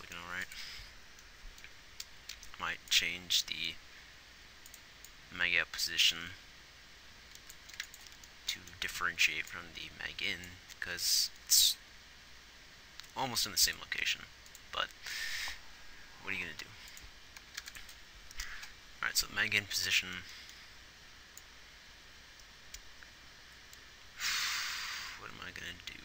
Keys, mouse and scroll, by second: 8.0 ctrl+s, 17.9 ctrl+s.